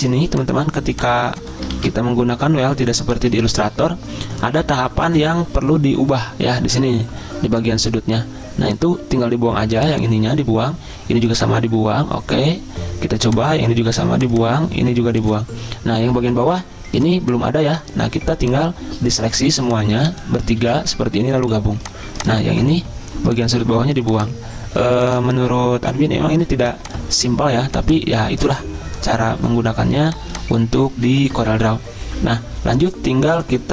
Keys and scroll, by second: 1.7 ctrl+z, 20.6 ctrl+z.